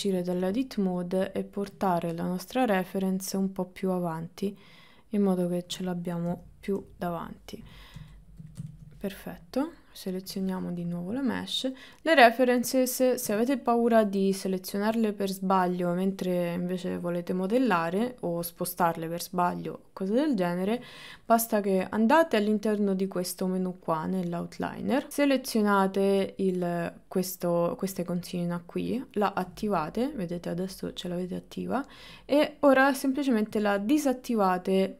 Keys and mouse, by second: 1.3 click, 2.2 click, 2.7 middle click, 4.2-5.5 drag, 6.3 KP_1, 6.8 KP_3, 8.5 shift+middle click, 8.8 middle click, 9.7 click, 12.1 click, 12.8 click, 15.1 click, 18.2 click, 24.6-29.5 drag, 32.2 click, 33.9 click.